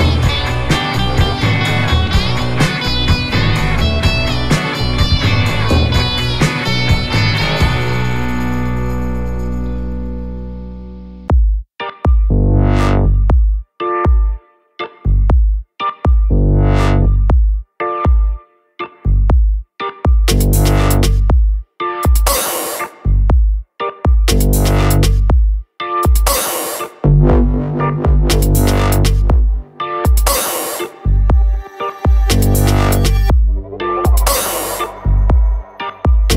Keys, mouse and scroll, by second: 0.6 Down, 0.9 Right, 2.3 Down, 4.3 Up, 5.3 Left, 5.7 Up, 6.1 Left, 6.4 Up, 7.7 click, 8.0 Up, 10.4 click, 11.2 Right, 12.4 Up, 12.9 Left, 13.3 Up, 13.8 Left, 14.1 Up, 15.9 click, 16.0 Down, 16.8 Right, 17.3 Down, 17.6 Right, 17.9 Down, 19.3 click, 26.7 click, 30.3 click, 31.1 ctrl+click, 33.8 click, 36.1 alt+click.